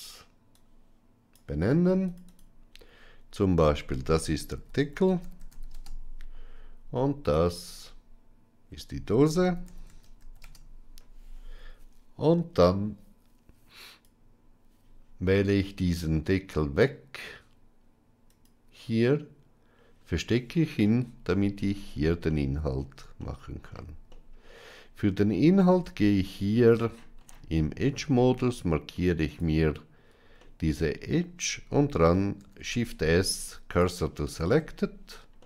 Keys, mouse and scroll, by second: 0.6 click, 1.9 click, 2.2-6.7 drag, 7.3-11.3 drag, 13.7 click, 18.2 click, 20.7 middle click, 22.1-22.7 middle drag, 23.1-23.6 shift+middle drag, 24.0-25.1 middle drag, 25.6 Tab, 30.3 middle click, 32.3 shift+s, 34.4 Tab, 35.3-35.4 middle drag.